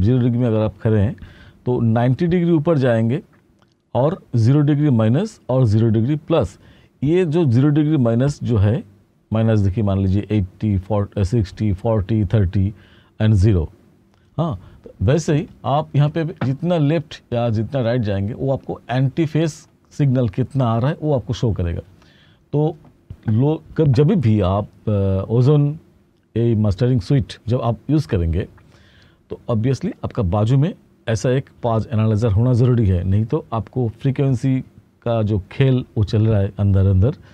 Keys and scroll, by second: 3.2-8.6 typing, 17.8-20.2 typing.